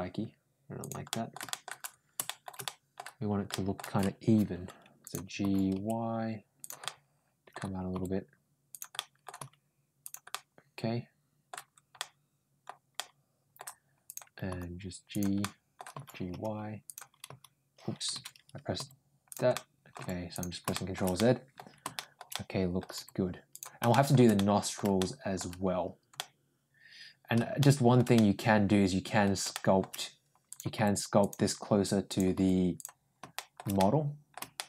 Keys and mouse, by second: 0.9 middle click, 1.3 shift+middle click, 2.1 shift+middle click, 2.5 middle click, 3.4 middle click, 4.9 click, 5.2 g, 6.6 middle click, 7.8 g, 8.8 middle click, 9.2 g, 10.1-11.3 middle drag, 11.8 middle click, 12.8 middle click, 13.9 click, 14.3 g, 15.2 middle click, 15.7 g, 17.1 h, 18.6 ctrl+g, 19.3 middle click, 19.8 ctrl+g, 20.5 middle click, 21.0 middle click, 21.8 middle click, 22.2 middle click, 22.8 g, 23.7 middle click, 24.2 middle click, 24.8 middle click, 26.0-27.2 middle drag, 27.4 shift+middle click, 28.0-29.0 middle drag, 29.3 shift+middle click, 30.3 click, 30.6 g, 31.9 click, 32.2 g, 33.2 middle click, 33.6 middle click, 34.4 middle click.